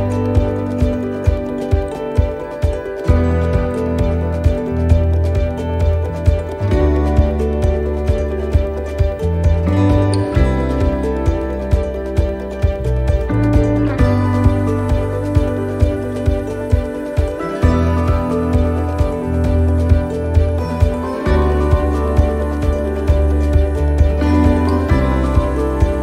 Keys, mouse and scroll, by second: 0.8-1.3 scroll down 4, 1.8 shift+middle click, 8.5 click, 10.8 scroll up 3, 11.4 right click, 12.3 x, 13.3 scroll down 3, 14.0 right click, 14.0 scroll down 1, 15.1 shift+d, 18.9 click, 22.5 click, 23.6 click.